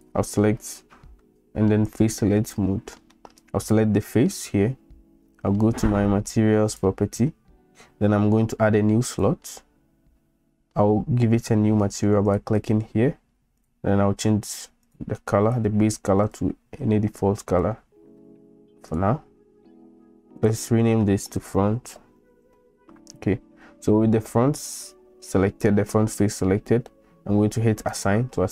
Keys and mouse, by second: 1.9 click, 3.1 middle click, 3.6 click, 12.3-12.6 drag, 13.6 click, 14.9 click, 16.3 click, 20.4 click, 20.5-23.4 drag, 27.9 click.